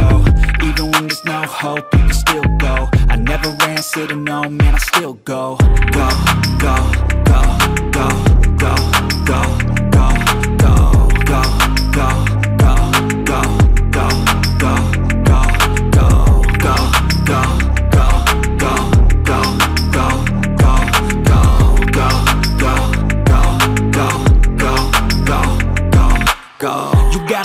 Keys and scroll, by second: 6.3 ctrl+g, 7.7 ctrl+z, 10.3 ctrl+g, 23.5 ctrl+j.